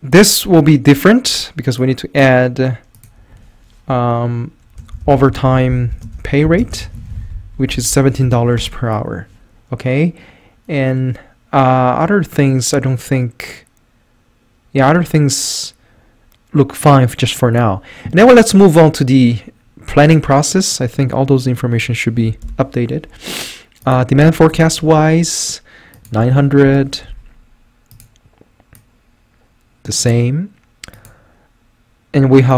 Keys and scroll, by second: 4.7-8.7 typing, 22.5 Delete, 24.5 =, 26.7 Return.